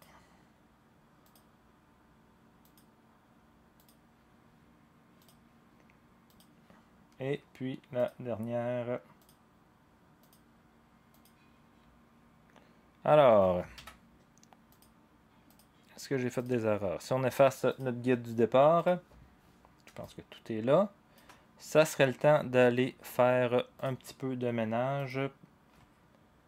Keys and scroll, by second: 13.7 ctrl+a.